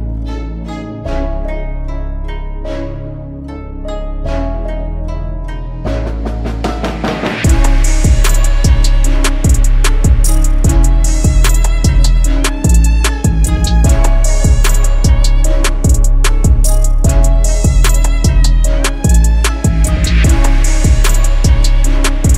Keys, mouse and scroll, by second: 0.0-1.4 typing, 3.2 typing, 16.9-19.2 scroll up 1.